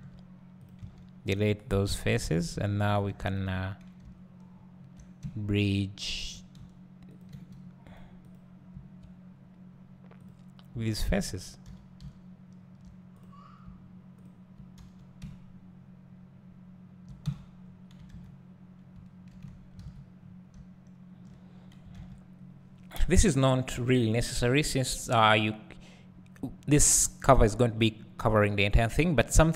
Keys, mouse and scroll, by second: 1.3 x, 1.8 scroll up 1, 2.1 2, 2.5 `, 3.3 alt+click, 4.0 `, 7.2 shift+click, 7.9 click, 10.9 shift+click, 11.7 f, 12.0 `, 13.2 click, 14.2 shift+click, 14.8 f, 15.2 `, 17.3 Tab, 17.6-18.9 scroll down 1, 19.3 alt+h, 19.9 a, 20.2-20.5 scroll down 1, 20.5 `, 21.5-24.2 scroll up 1.